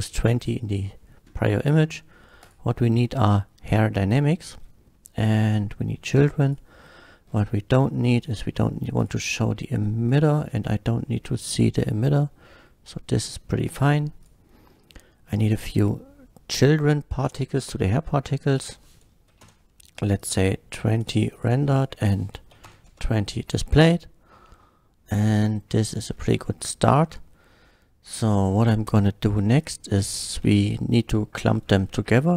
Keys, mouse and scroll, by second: 0.1 scroll up 1, 2.4 click, 3.0-3.6 middle drag, 5.5 click, 6.5 click, 7.2 scroll down 1, 8.2 click, 9.0 click, 10.1 click, 11.4 click, 11.8-13.1 middle drag, 14.8-15.8 middle drag, 18.5 click, 19.3 KP_2, 19.4 KP_0, 20.2 click, 20.9 click, 21.3 click, 22.5 KP_2, 22.7 KP_0, 22.9 Return, 23.8-26.0 middle drag, 26.5-26.9 middle drag, 29.5 click.